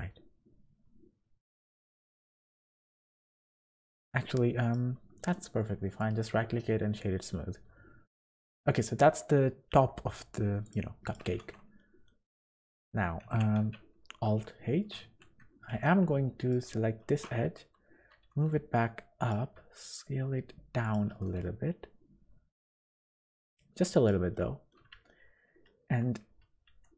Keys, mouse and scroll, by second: 0.1-0.5 scroll up 3, 1.8 click, 3.0 click, 5.2 right click, 6.5-6.9 scroll down 4, 6.9 middle click, 7.6-8.0 scroll down 3, 8.0 middle click, 9.1 scroll up 2, 10.0 middle click, 10.6 click, 11.0 click, 11.3 Tab, 11.8 middle click, 12.3 scroll up 2, 12.6 Tab, 13.2 Tab, 13.6 a, 14.2 alt+h, 15.0 2, 15.7 alt+a, 16.4 alt+shift+click, 17.0 shift+middle click, 18.1 g, 19.5 s, 21.0 g, 24.3 middle click, 25.0 shift+middle click, 26.7 e.